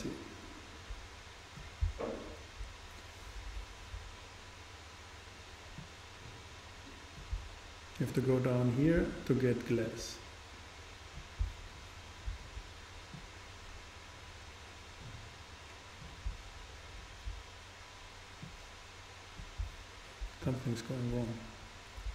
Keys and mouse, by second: 5.8-7.6 drag, 8.1-11.8 drag, 13.2-15.1 drag, 18.4-20.4 drag.